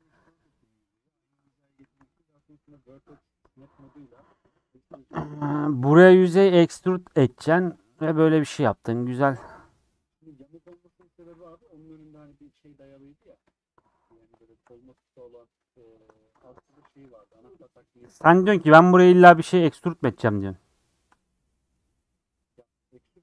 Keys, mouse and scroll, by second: 1.0 ctrl+x, 1.7 click, 1.8 ctrl+x, 2.1 middle click, 3.0 scroll down 2, 3.1 middle click, 4.0 3, 4.4 click, 5.4 click, 6.3-7.4 middle drag, 7.4 shift+click, 7.8 shift+click, 9.1-11.6 middle drag, 11.6 shift+Tab, 13.2 shift+Tab, 15.0 click, 17.2-23.2 middle drag.